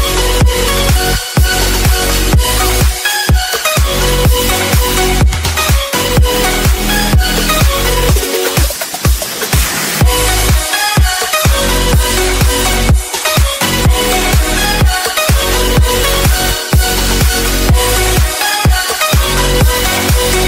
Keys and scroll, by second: 2.1 ctrl+z, 18.7 ctrl+space.